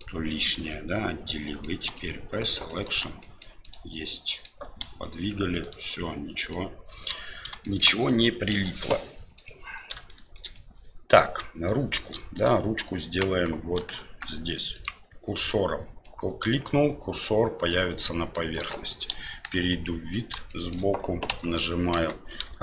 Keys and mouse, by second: 0.6-1.7 middle drag, 1.9 e, 2.5 p, 2.8 Tab, 3.2 middle click, 3.6 right click, 3.9 middle click, 4.7 g, 5.9-6.5 middle drag, 7.6 middle drag, 9.3-9.9 middle drag, 10.1 shift+middle click, 10.5 middle click, 11.6 shift+middle click, 12.3 right click, 13.3 KP_1, 13.9 KP_3, 14.8 click, 16.0-16.4 middle drag, 17.7-18.1 middle drag, 18.5 middle click, 19.1 KP_1, 19.5 KP_3, 20.5 shift+middle drag, 21.3 Tab, 22.0 Tab.